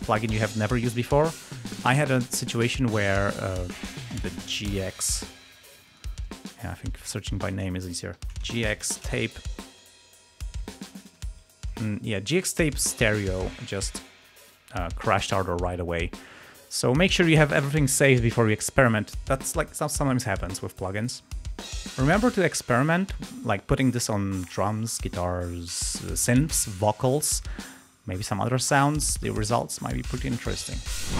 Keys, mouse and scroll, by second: 0.8 space, 2.9 space, 3.7 ctrl+click, 4.2 ctrl+shift+a, 5.8 click, 6.3 click, 7.0 ctrl+click, 7.3 ctrl+a, 8.0-11.3 typing, 28.7 space, 30.6 space.